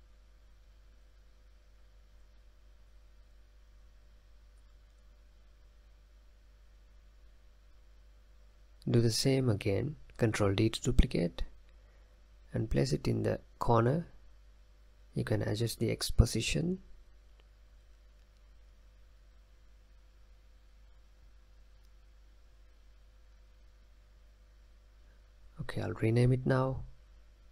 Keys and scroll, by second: 1.1 ctrl+a, 1.7 Left, 1.9 Right, 2.0 Right, 2.2 Right, 2.4 Right, 3.1-4.9 typing, 6.4-7.5 typing, 10.3 ctrl+d, 23.9 ctrl+a, 24.0-26.4 typing.